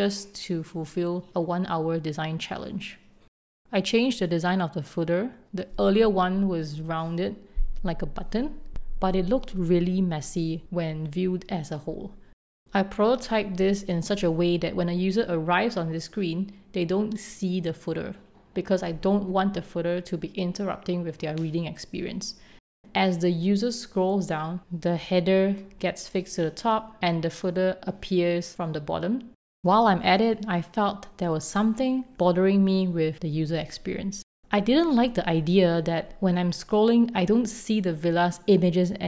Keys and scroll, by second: 1.8 v.